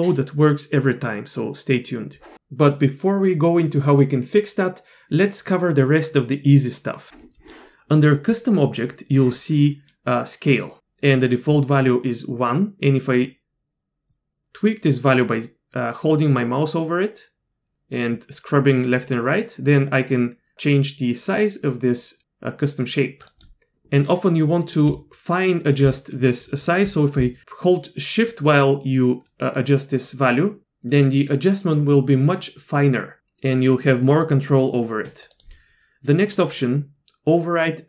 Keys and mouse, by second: 14.1-23.4 drag, 28.3-35.4 shift+drag.